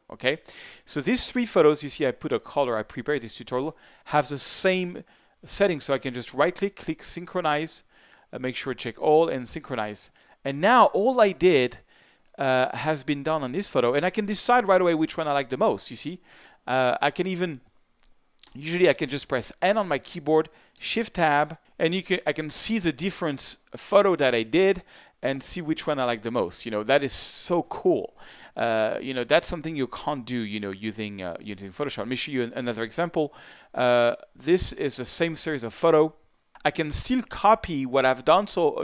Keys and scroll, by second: 18.5 shift+n, 20.9 shift+Tab, 31.7 shift+Tab, 36.5 super+v.